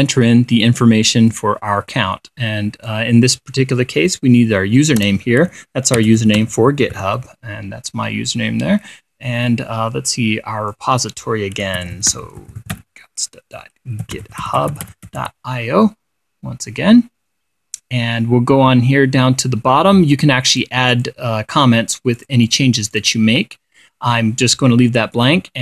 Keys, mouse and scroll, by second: 1.8-3.6 drag, 5.5-7.9 typing, 10.0-11.4 drag, 12.0-16.2 typing, 17.3 scroll down 2, 18.7-19.7 scroll down 6, 21.0 click, 21.4 click, 22.0 click, 22.7 click, 23.4 click.